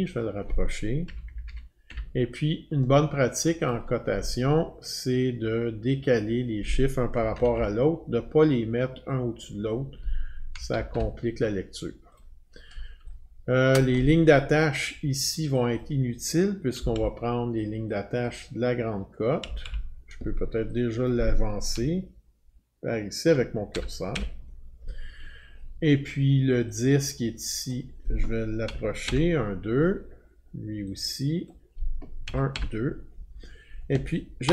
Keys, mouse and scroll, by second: 0.1 click, 1.5 Up, 3.7 Up, 3.7 click, 6.2 click, 7.2 Left, 7.4 Left, 7.6 Left, 9.7 click, 10.6 Right, 10.7 Right, 10.9 Right, 12.2 click, 13.8 click, 15.8 click, 16.8 Delete, 17.0 Delete, 18.3 click, 19.4 Delete, 19.7 Delete, 21.1 click, 21.8-23.4 Right, 23.8 Right, 24.1 Right, 27.7 click, 28.7 Right, 29.1 Right, 31.5 click, 32.3 Right, 32.5 Right.